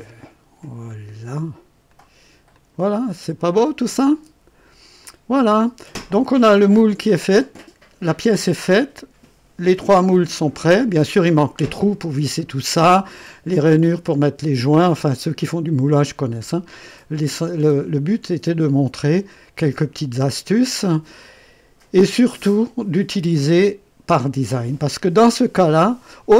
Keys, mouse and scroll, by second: 0.8 click, 1.8 click, 2.5 click, 3.0-4.8 drag, 5.0 click, 6.0 right click, 10.1-11.1 drag, 13.1-13.7 drag, 15.4 right click, 16.4-17.0 drag, 17.2-17.7 right drag, 18.6-21.3 drag.